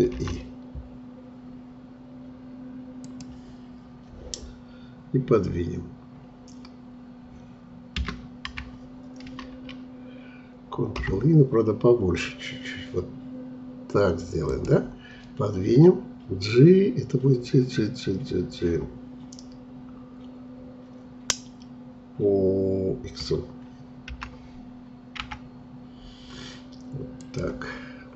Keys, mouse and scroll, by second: 7.9 Escape, 9.2 ctrl+z, 24.1 g.